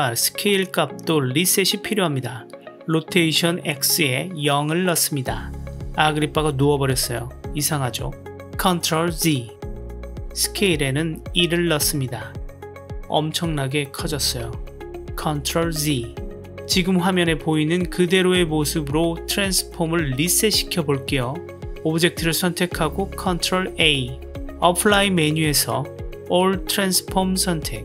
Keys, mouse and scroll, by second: 2.0-4.5 drag, 6.4-8.6 middle drag, 8.7 ctrl+z, 9.3-10.0 middle drag, 10.8-12.5 drag, 13.5-14.8 middle drag, 15.7 ctrl+z, 16.2 KP_Decimal, 18.0-21.7 middle drag, 22.9 ctrl+a.